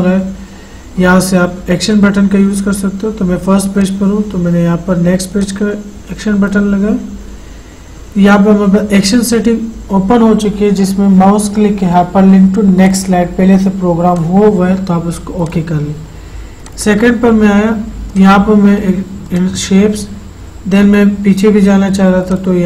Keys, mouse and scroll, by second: 1.0-2.8 scroll down 1, 4.0 click, 13.0 click, 13.1 click, 20.5 click, 22.5-22.6 drag.